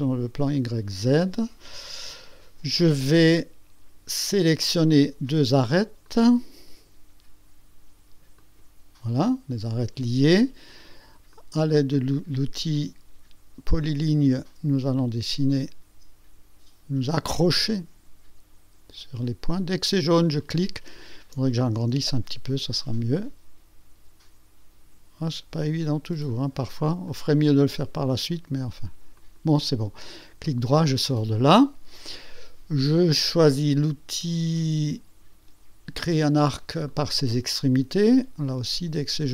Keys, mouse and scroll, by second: 0.0 click, 0.5 click, 4.5 click, 6.0 click, 8.4 click, 11.3 click, 17.1 click, 20.4 click, 21.8 scroll up 2, 27.1 click, 29.1 click, 30.4 right click, 36.9 click.